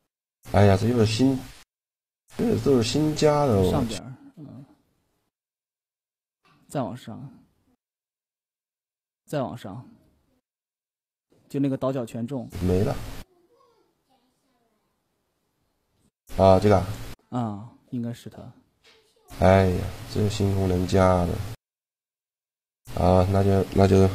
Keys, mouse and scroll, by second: 0.2 middle click, 1.3 Tab, 2.7-4.4 drag, 16.5-18.4 drag, 19.6 Tab, 20.4 Tab, 21.8 click, 23.6 right click.